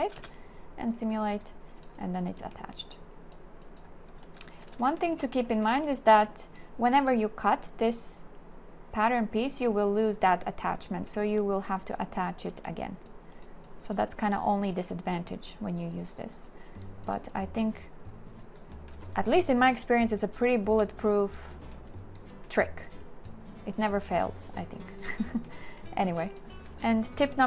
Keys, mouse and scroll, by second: 0.2 space, 5.0 shift+click, 5.1 shift+w.